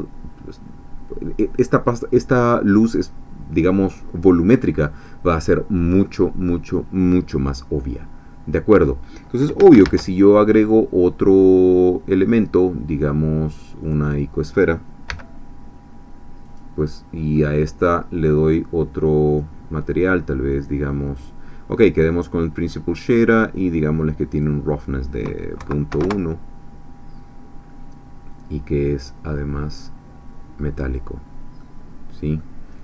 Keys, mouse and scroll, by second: 3.8-8.3 middle drag, 8.3-8.7 scroll down 1, 8.8 scroll up 2, 9.8 shift+a, 13.8 click, 15.1 g, 16.5 click, 16.8-18.8 middle drag, 19.3 click, 21.6 scroll down 1, 22.0 middle click, 24.3 click, 25.9 1, 26.0 Return, 28.3 click, 29.8-31.1 drag, 31.6-32.5 middle drag.